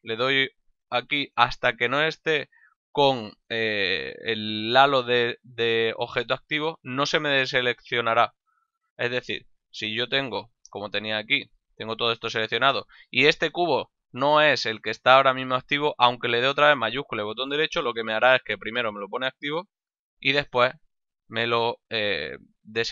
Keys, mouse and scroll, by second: 2.4 shift+right click, 6.6 shift+right click, 10.7 a, 17.1 shift+right click, 19.8 shift+right click.